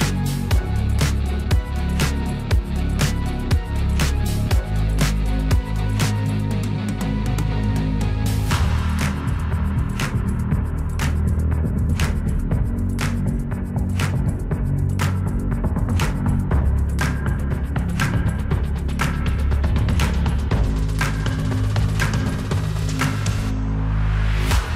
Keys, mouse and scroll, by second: 1.5 scroll up 1, 3.8 scroll down 1, 4.8-6.0 scroll down 1, 6.0-7.7 drag, 15.8 click, 16.7-24.7 drag.